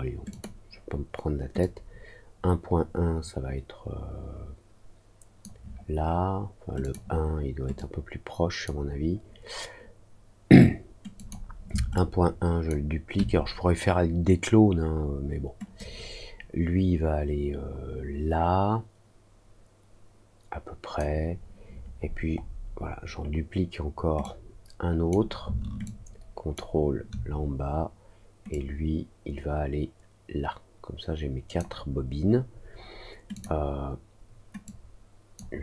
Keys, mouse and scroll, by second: 0.2 click, 1.5-5.3 drag, 6.7 click, 7.7 click, 11.1 click, 11.9 ctrl+click, 15.7-20.9 drag, 22.0 middle click, 22.3 middle click, 24.1 click, 25.8 ctrl+click, 28.4-31.5 drag, 33.3 click, 34.6 click.